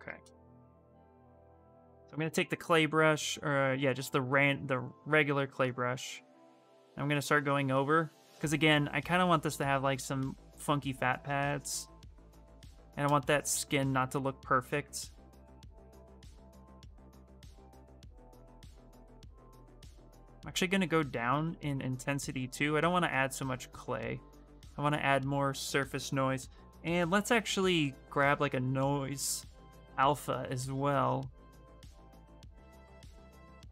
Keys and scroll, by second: 1.7-2.6 typing, 17.8 s, 19.9 space, 21.1 ctrl+z, 21.5 ctrl+z, 21.8 ctrl+z.